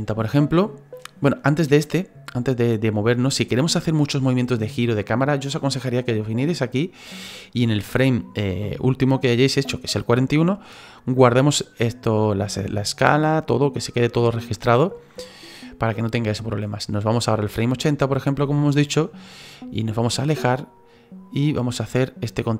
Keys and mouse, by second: 1.7 click, 6.3 click, 11.1 click, 17.4 click, 20.5 middle click.